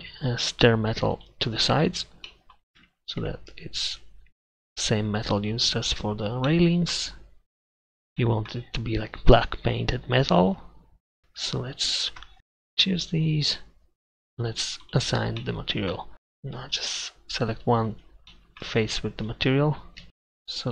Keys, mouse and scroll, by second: 2.3 middle click, 2.8 Tab, 3.3 Tab, 11.2 ctrl+KP_Add, 20.0 a.